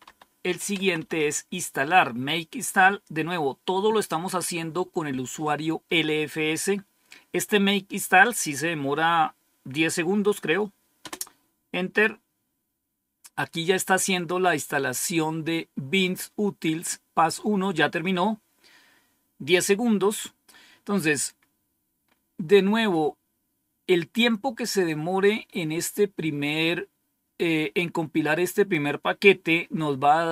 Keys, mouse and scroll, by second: 0.0-1.6 typing, 10.9 Return, 22.0-23.9 scroll up 1, 23.9-24.2 scroll up 1, 24.6 click.